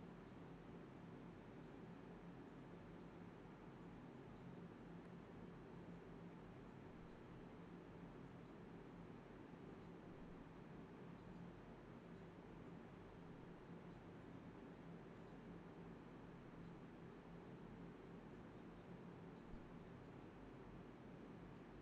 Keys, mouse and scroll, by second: 0.6 alt+click, 0.9 alt+click, 1.5 alt+click, 1.5 alt+double click, 1.6 alt+click, 2.6 alt+click, 2.7 alt+click, 4.4 ctrl+b, 4.8-5.4 typing, 6.8 typing, 7.3 alt+click, 7.4 alt+click, 8.4 ctrl+z, 8.5 ctrl+z, 8.7-9.3 typing, 9.8 double click, 10.6 alt+click, 10.8 d, 11.0 ctrl+b, 11.4 double click, 12.6 typing, 13.2 ctrl+b, 14.3 alt+click, 16.0-16.3 typing, 18.4 typing, 19.3 alt+click.